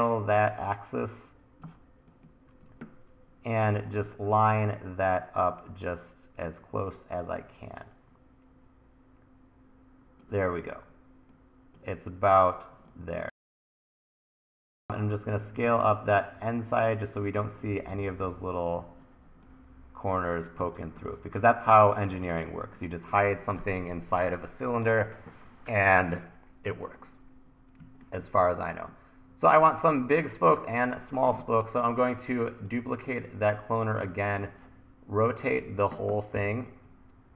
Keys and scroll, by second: 2.7 super+z, 3.8 1, 10.7 e, 13.6 1, 14.7 t, 20.6 super+r, 22.3 super+r, 27.9 1, 30.2 super+s, 35.5 t, 36.4 r.